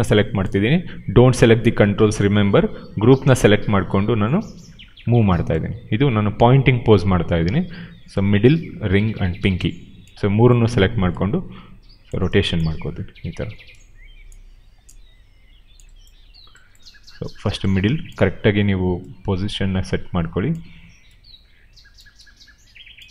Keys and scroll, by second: 2.4 e.